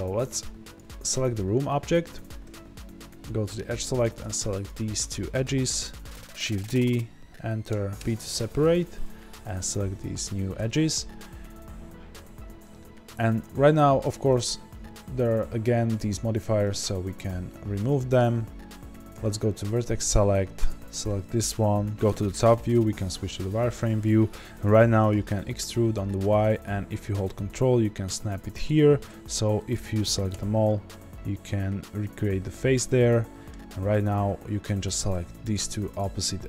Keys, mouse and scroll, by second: 0.7 click, 1.2 scroll down 1, 1.8 Tab, 2.4 2, 3.8 click, 6.1 shift+d, 8.0 p, 8.0 Return, 8.6 Tab, 9.4 click, 10.5 Tab, 11.4 a, 16.7 click, 17.2 click, 17.8-20.6 middle drag, 19.1 1, 20.6 click, 22.0 KP_7, 23.4 z, 25.0 e, 30.6-35.4 middle drag, 35.0 2, 35.4 click.